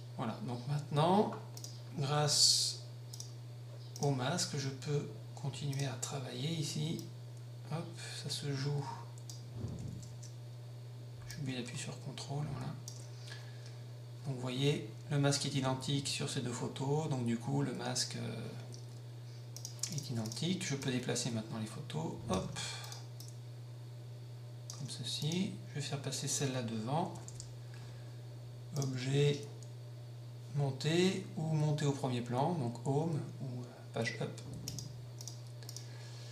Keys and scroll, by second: 27.2 Page_Up.